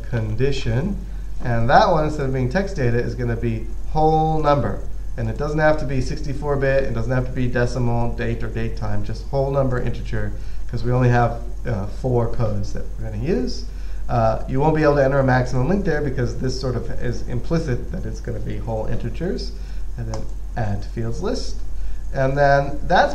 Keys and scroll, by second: 0.0-1.4 typing.